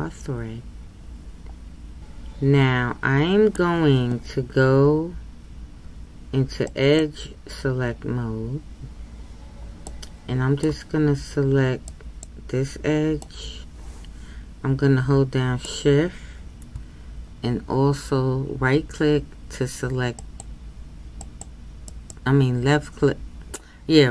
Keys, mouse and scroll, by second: 7.0-9.9 drag, 9.9-11.9 middle drag, 11.9-13.2 right drag, 13.2-21.9 middle drag, 21.9-24.1 shift+right drag.